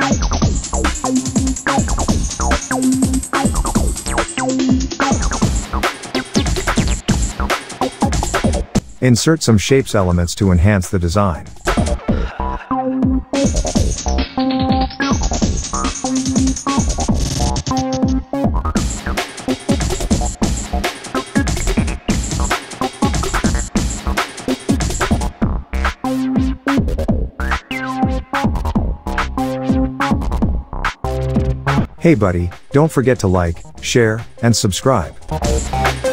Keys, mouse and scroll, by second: 0.5 ctrl+a, 0.8-2.4 drag, 4.2 shift+click, 5.1 click, 6.0 alt+scroll down 1, 6.5 click, 8.3 alt+Tab, 8.9 Caps_Lock, 9.4 click, 10.2 shift+click, 11.4-11.7 click, 12.2-12.5 click, 21.3 click, 23.3-24.3 shift+click, 26.1 click, 27.7 alt+scroll up 1, 28.4 p, 29.1 alt+scroll up 1, 29.6 click, 30.8-33.2 shift+drag, 33.9 ctrl+z, 34.9 click.